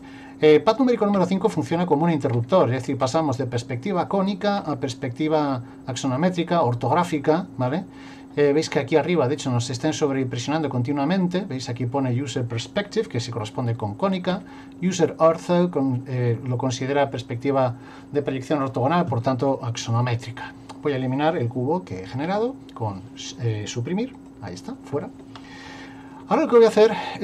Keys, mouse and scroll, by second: 1.1 KP_5, 1.7 KP_5, 2.3 KP_5, 3.0 KP_5, 4.6 KP_5, 14.3 KP_5, 22.2 Delete, 25.7 shift+middle click, 26.4 middle click, 27.0 middle click.